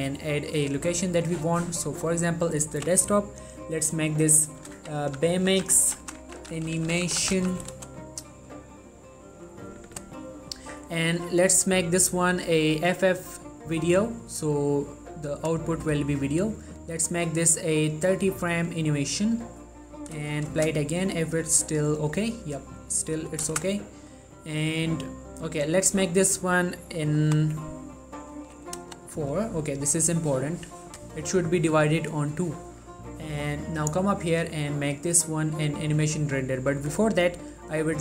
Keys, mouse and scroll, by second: 4.8-7.5 typing, 7.9 Return, 9.5 click, 13.8 click, 14.5-15.3 scroll down 1, 16.3-16.8 scroll up 1, 16.8 click, 20.7 space, 23.6 space, 25.9 click, 34.1 click, 37.5 click.